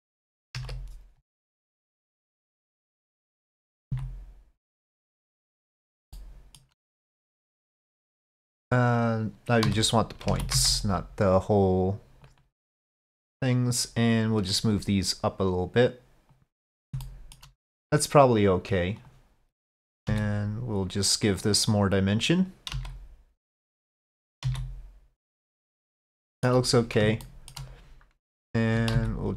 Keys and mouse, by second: 0.5 KP_5, 0.6 KP_1, 2.5 shift+middle click, 3.9 s, 6.2 shift+middle click, 7.6 2, 7.6 c, 7.6 shift+middle click, 8.6 click, 9.7 1, 10.3 alt+a, 10.6 c, 14.9-16.4 drag, 17.0 shift+click, 19.0 click, 19.8 click, 20.1 s, 22.5 click, 22.8 s, 24.3 1, 25.4 s, 26.1 shift+click, 26.2 middle click, 27.3 shift+middle click, 28.4 alt+click, 29.0 s.